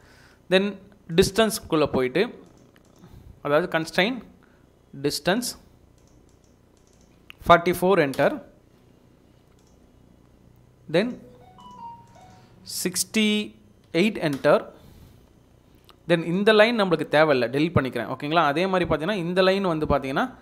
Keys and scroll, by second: 7.7 typing, 8.1 Return, 13.8-14.3 typing, 14.3 Return, 15.0 Escape, 15.4 Escape, 16.8 Delete.